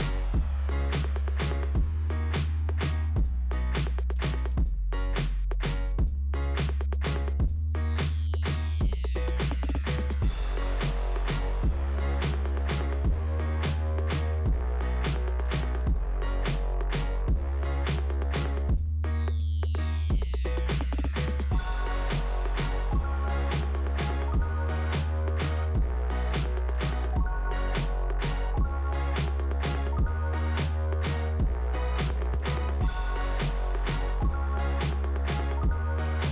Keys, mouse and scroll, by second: 0.6 click, 2.5 click, 4.7 middle click, 6.4 scroll up 2, 7.6 click, 9.3 click, 9.5 click, 9.6 click, 11.0 click, 12.1 scroll down 1, 13.1 click, 13.8 click, 20.0 click, 22.2 scroll down 2, 24.2 scroll up 2, 26.0 click, 26.9 click, 27.8 click, 28.6 scroll down 2, 30.0 click, 33.5 click, 34.6 click, 35.6 scroll up 2.